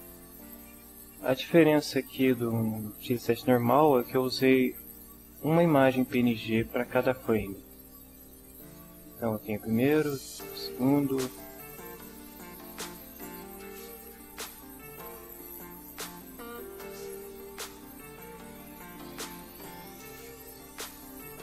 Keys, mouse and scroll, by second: 10.1 click, 11.4 click, 12.5 click, 13.3 click, 15.5 click, 16.4 click, 17.0 click, 17.9 click, 18.1 scroll down 1, 20.9 click.